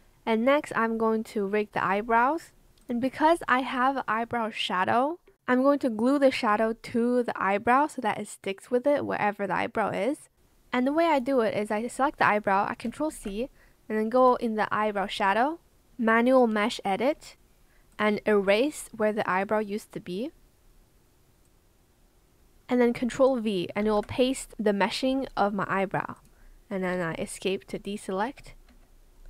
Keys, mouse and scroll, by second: 1.7 Escape, 13.0 ctrl+c, 17.3 ctrl+v, 17.3 ctrl+z, 23.7 ctrl+v, 28.2 Escape.